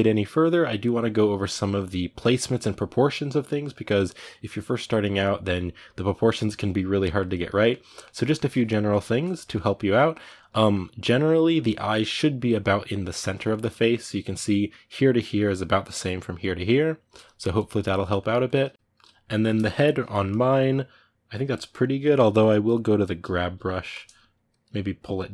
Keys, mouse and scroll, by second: 1.3-23.0 middle drag, 23.0 g, 23.3 f, 24.3-25.3 drag.